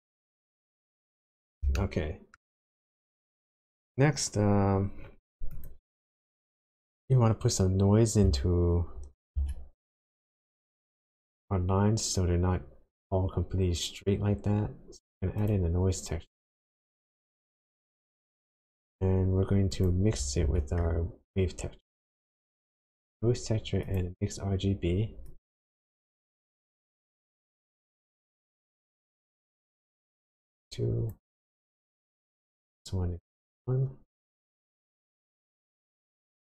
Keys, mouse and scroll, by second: 0.0-0.4 scroll down 1, 0.4-0.9 scroll up 2, 1.0-1.7 scroll down 5, 1.7 shift+middle click, 2.7-3.1 scroll down 1, 5.6 click, 9.3 shift+a, 19.8 click, 20.4 shift+a, 25.8-26.9 scroll up 6, 27.7 click, 30.5 click, 31.5-32.0 scroll down 4, 32.0 middle click, 32.7-33.1 scroll down 1, 33.7 click.